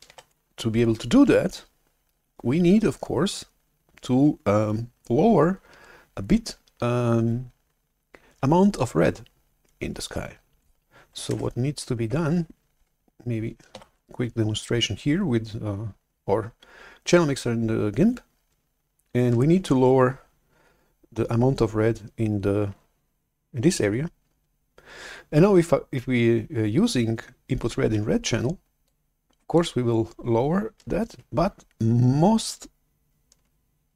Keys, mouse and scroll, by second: 0.1 shift+super+F11, 11.3 alt+Tab, 13.6 shift+super+F11, 28.8-30.7 drag.